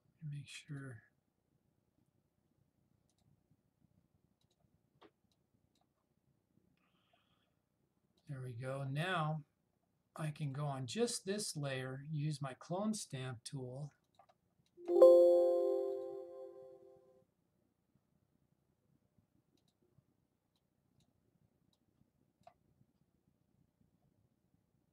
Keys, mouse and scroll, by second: 0.8 click, 3.2-6.1 drag, 14.1 alt+Num_Lock, 14.1 click, 19.7-21.2 drag.